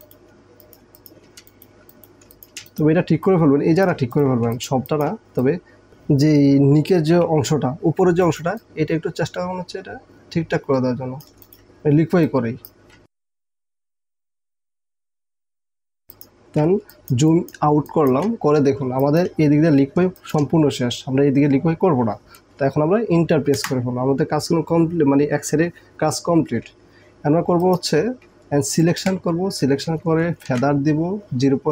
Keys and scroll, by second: 0.8 alt+space, 1.5 alt+space, 2.3 alt+space, 4.5 alt+space, 13.0 space, 13.6 alt+space, 15.7 alt+space, 18.9 alt+space, 23.7 Return, 27.6 space, 28.4 ctrl+space, 30.5 ctrl+alt+d.